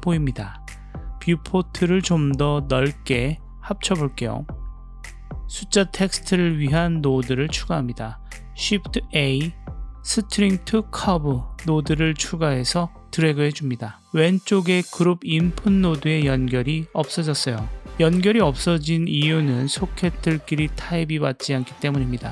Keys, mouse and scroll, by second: 2.3-4.8 right drag, 5.2 drag, 5.9-6.4 drag, 6.4 middle click, 7.8-8.8 drag, 9.1 shift+a, 13.9-15.3 middle drag.